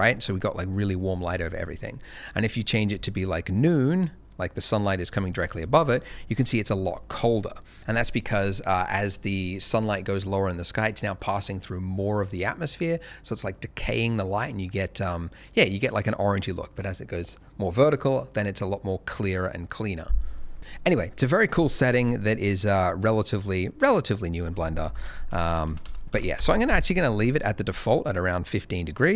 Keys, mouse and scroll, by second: 0.9 middle click, 1.2 scroll down 1, 2.4 click, 5.3-6.4 scroll up 1, 7.1 scroll down 1, 22.3 click, 24.9-26.0 typing, 26.3 Return, 28.5 middle click, 28.8 scroll up 1.